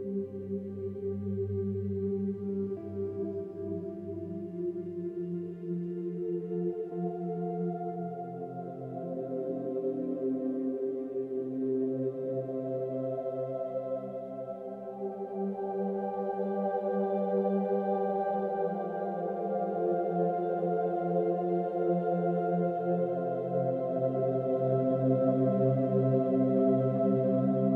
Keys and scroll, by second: 0.2 space, 2.3 space, 4.6 ctrl+z, 8.1 space, 9.7 ctrl+z, 10.2 space, 11.6 ctrl+z, 12.8 ctrl+z, 13.4 space, 17.0 ctrl+z, 19.1 ctrl+alt+shift+n, 19.2 ctrl+alt+g, 19.4 space, 20.8 space.